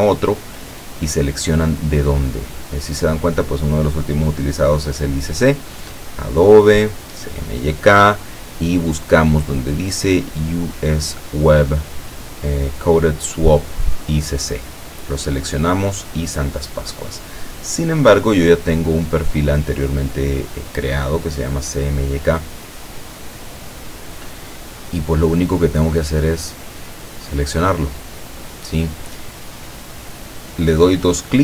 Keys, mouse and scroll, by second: 3.8 click, 6.1 click, 7.2 click, 15.4 click, 17.5-19.1 drag, 21.9 click, 23.4 click, 26.2-27.5 drag, 29.6 click.